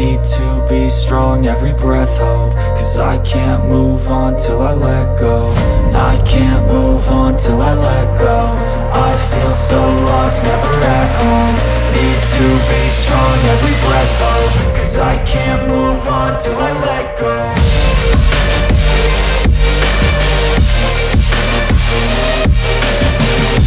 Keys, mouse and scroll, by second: 0.3 ctrl+g, 0.8 click, 1.9 z, 2.4 click, 2.5 space, 2.7 click, 3.0 space, 6.2 click, 7.7-10.0 typing, 7.8 click, 8.5 click, 8.8 click, 9.3 click, 9.7 click, 15.9 click, 18.4 click, 21.1 click.